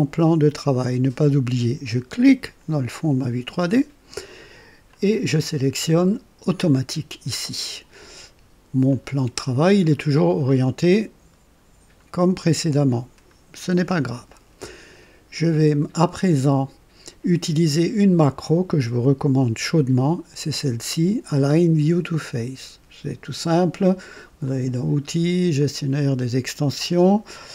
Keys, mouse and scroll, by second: 2.2 click, 4.8 click, 6.5 click, 8.8 click, 9.5-9.9 scroll down 2, 10.0 scroll up 1, 10.4-13.3 drag, 24.4 click, 25.5 click.